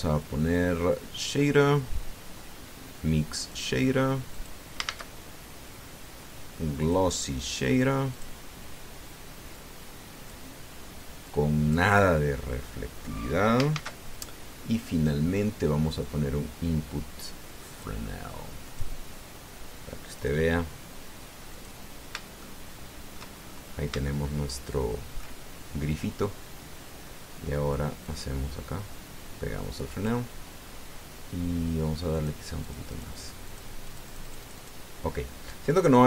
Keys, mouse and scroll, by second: 4.3 click, 5.2 click, 5.6 shift+a, 7.6 click, 8.9 click, 10.3 click, 12.1 click, 14.5 shift+a, 18.5 click, 19.4 click, 20.9 click, 22.3 click, 23.2 shift+click, 24.2-24.7 shift+scroll up 3, 24.8-26.1 shift+middle drag, 28.8-31.0 drag, 32.9 click, 33.4-34.6 drag, 34.7 click.